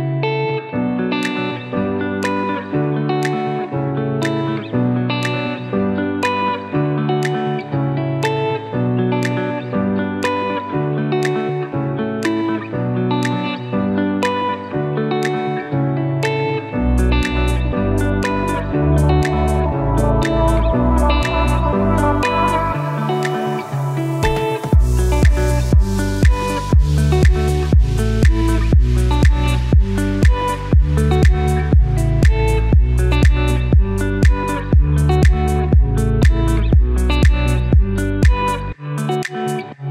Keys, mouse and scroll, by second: 8.7 Up, 9.6 Down, 14.4 Up, 18.3 click, 20.2 scroll up 1, 20.6-25.5 typing, 20.7 click, 20.8 click, 21.7 click, 23.0 click, 23.4 click, 25.1 click, 27.2-27.6 scroll up 1, 27.6 click, 28.4-29.4 scroll up 1, 30.6-32.8 typing, 30.8 click, 31.9 click, 32.9 click.